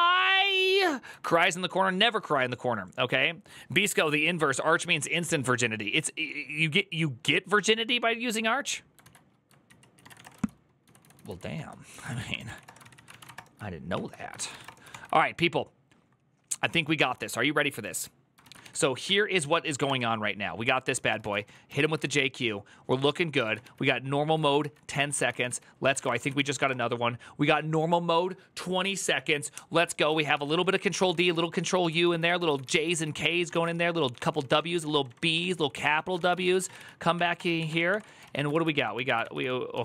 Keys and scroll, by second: 8.9 alt+{, 9.4 ctrl+c, 9.6-14.8 typing, 13.7 ctrl+t, 18.2 ctrl+a, 18.4 ctrl+a, 18.8 Up, 19.7 Return, 20.3-22.2 typing, 23.2 ctrl+a, 23.4-27.0 typing, 24.1 ctrl+a, 25.8 Return, 26.0 ctrl+a, 29.9 ctrl+a, 30.1 1, 30.3 ctrl+c, 30.4 ctrl+d, 30.6 ctrl+u, 31.7-39.5 typing, 37.1 Return, 37.4 Up, 38.3 ctrl+u, 39.0 ctrl+c.